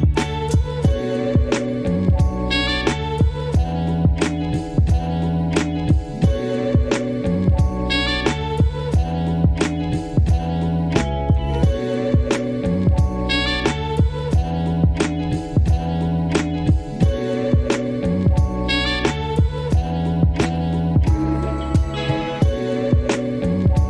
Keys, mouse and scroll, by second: 0.4 click, 0.7 scroll down 2, 0.8 middle click, 1.7 Tab, 1.9 middle click, 2.1 scroll up 3, 4.0 ctrl+r, 4.8 middle click, 4.9 ctrl+z, 5.0 middle click, 5.1 ctrl+r, 5.7 middle click, 5.8 Tab, 5.9 middle click, 6.3 Tab, 6.3 middle click, 7.0 click, 7.2 click, 7.4 alt+click, 7.5 middle click, 7.8 middle click, 8.0 right click, 8.4 scroll down 2, 8.5 middle click, 8.9 alt+shift+click, 9.1 middle click, 9.6 alt+shift+click, 9.7 middle click, 10.0 middle click, 10.4 right click, 10.9 middle click, 11.4-11.8 scroll up 1, 11.8 KP_3, 13.0 s, 13.5 click, 15.2 click, 15.3 click, 16.7 click, 17.0 click, 18.0 click, 19.5 click, 20.5 click, 20.9-22.2 drag, 22.7 click, 23.3 click, 23.8 click.